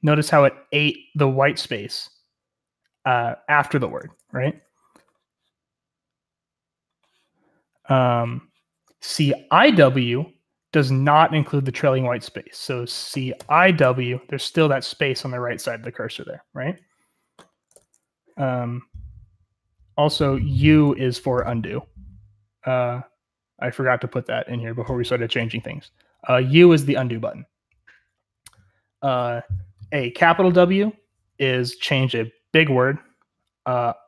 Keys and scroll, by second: 3.9 Escape, 4.1 u, 12.8-14.2 typing, 17.6 Escape, 17.9 u.